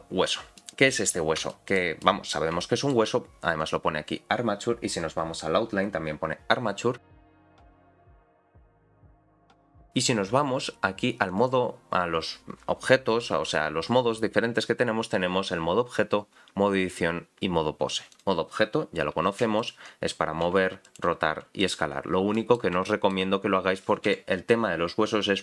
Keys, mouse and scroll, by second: 0.6 middle click, 1.5 shift+middle click, 2.0 middle click, 2.6 shift+middle click, 11.3-18.2 drag, 20.0-21.3 scroll down 2, 20.4 s, 21.3 r, 22.3 middle click, 22.9 shift+middle click, 24.1 n.